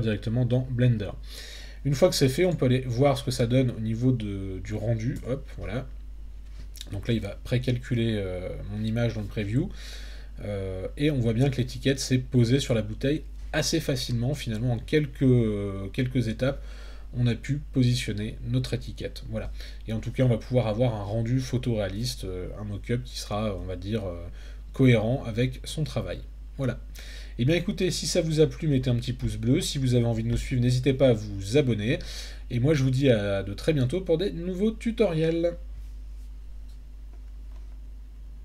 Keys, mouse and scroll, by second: 2.4 click, 5.2 Tab.